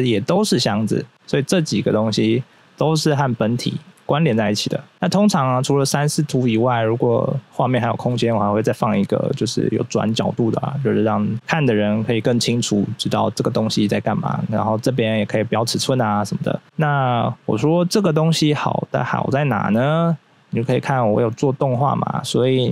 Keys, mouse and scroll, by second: 0.6 double right click, 0.8 right click, 1.2 right click, 1.4 right click, 4.9 right click, 5.2 double right click, 5.4 double right click, 5.5 right click, 6.0 right click, 6.5 right click, 6.8 double right click, 7.0 double right click, 7.2 double right click, 8.2 double right click, 8.3 double right click, 8.4 right click, 21.4 click.